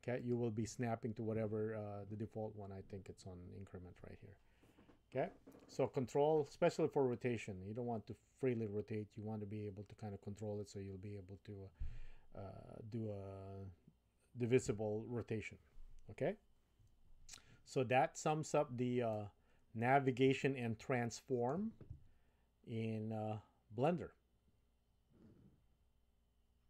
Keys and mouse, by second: 19.2-20.1 middle drag, 20.4-21.7 shift+middle drag.